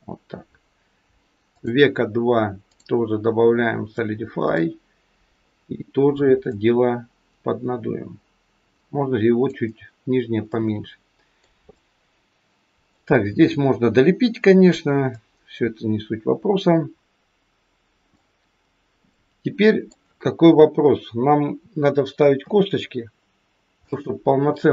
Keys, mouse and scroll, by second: 1.5 click, 2.6 click, 6.4 click, 10.5 middle click, 11.6 middle click, 13.8-14.8 scroll down 2, 15.0 middle click, 19.0 middle click, 22.4 KP_3, 23.0-23.5 scroll down 2, 23.5 scroll down 1, 23.8 shift+middle click.